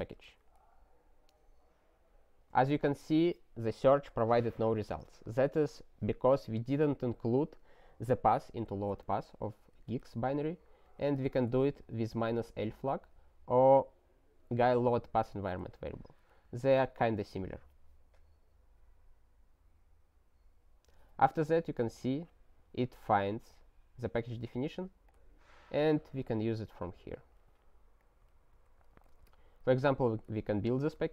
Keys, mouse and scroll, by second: 0.0 ctrl+y, 0.4 Return, 9.7 alt+w, 10.9 click, 11.2 ctrl+space, 11.3 ctrl+a, 11.6 alt+w, 15.3 Return, 16.0 ctrl+y, 16.6 Return, 22.0 click, 23.3 click, 25.1 click, 26.8 alt+w, 28.0 click, 28.5 ctrl+n, 28.6 ctrl+a, 28.9 ctrl+space, 29.0 ctrl+e, 29.6 alt+w, 29.8 click, 30.4 ctrl+y, 31.0 Return.